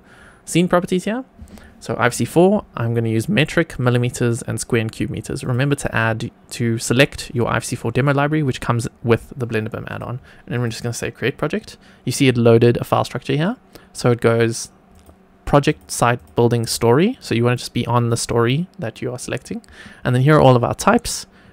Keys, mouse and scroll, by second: 5.3-9.9 drag, 10.4 click, 14.9 click, 15.6 click, 16.1-16.7 drag.